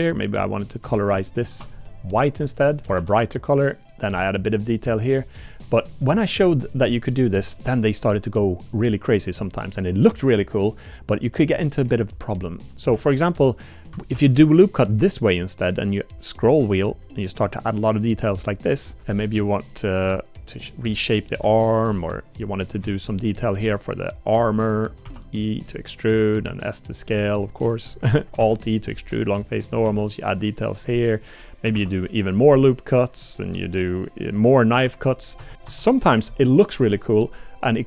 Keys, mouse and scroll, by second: 1.5 3, 1.6 click, 2.8 a, 3.0 g, 4.2 Tab, 4.5 middle click, 5.5-5.9 middle drag, 8.6 click, 9.7 click, 12.8 click, 12.9 Tab, 13.5 click, 14.1 ctrl+r, 17.8 middle click, 19.0 3, 19.2 middle click, 19.2 click, 20.0 g, 21.4 g, 22.9 shift+click, 23.8 shift+click, 24.3 shift+click, 24.6 shift+click, 25.1 e, 26.5 s, 27.8 shift+click, 28.4 alt+e, 29.8 s, 31.0 middle click, 31.8 ctrl+r, 33.0 click, 33.5 1, 33.5 \, 34.7 k, 35.7 Tab.